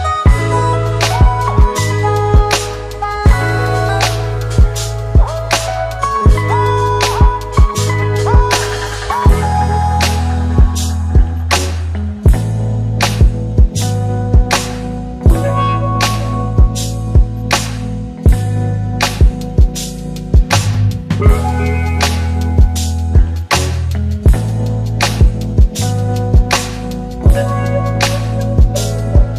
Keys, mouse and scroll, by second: 3.5-3.8 scroll down 1, 3.8 space, 4.0 click, 4.2-5.3 space, 6.2 click, 7.1 shift+click, 10.0 click, 13.1 click, 16.3 click, 20.3 ctrl+n, 22.7-25.1 typing, 26.3 click.